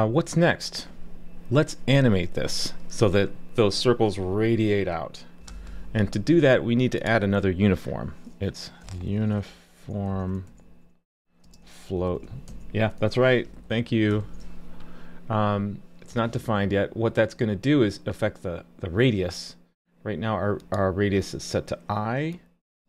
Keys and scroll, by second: 14.2 super+s.